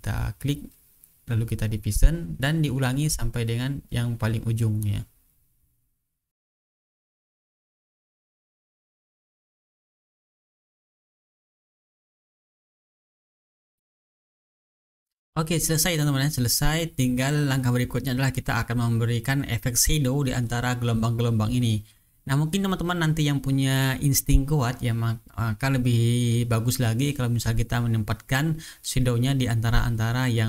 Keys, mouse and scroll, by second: 0.9 click, 1.9 click, 2.7 click, 3.1 click, 4.7 click, 5.2 click, 6.2 ctrl+scroll down 2, 6.5 ctrl+click, 6.6 ctrl+scroll up 2, 6.7 ctrl+shift+click, 6.8 click, 7.1 shift+click, 7.3-7.7 ctrl+shift+scroll down 2, 7.5 click, 7.6 click, 7.7 ctrl+click, 7.8 click, 8.0 click, 8.2 ctrl+scroll up 1, 8.3 click, 8.5 ctrl+d, 8.6 shift+click, 8.9 click, 9.1 click, 9.2 click, 9.3 click, 9.6 click, 9.7 ctrl+scroll down 1, 9.8 ctrl+scroll up 1, 9.9 click, 10.0 right click, 10.1 click, 10.3 shift+click, 10.4 click, 10.6 click, 10.8 click, 11.0 click, 11.1 ctrl+scroll down 1, 11.2 ctrl+scroll up 1, 11.4 click, 11.4 right click, 11.6 click, 11.8 shift+click, 12.1 click, 12.2 click, 12.3 click, 12.7 click, 12.8 ctrl+scroll down 1, 12.9 ctrl+click, 13.0 shift+click, 13.2 click, 13.5 click, 13.6 click, 14.2 click, 15.5 click, 16.2-16.6 ctrl+scroll down 1, 16.8 ctrl+scroll up 2, 18.1-18.9 ctrl+scroll up 2.